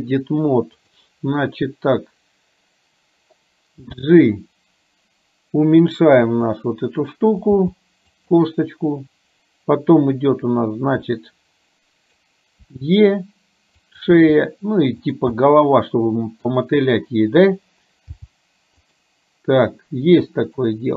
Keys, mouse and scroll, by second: 3.9 g, 7.6 g, 11.1 scroll up 1, 11.3-12.3 middle drag, 12.8 e, 14.1 e, 15.6 middle click, 18.3 g, 20.6 middle click.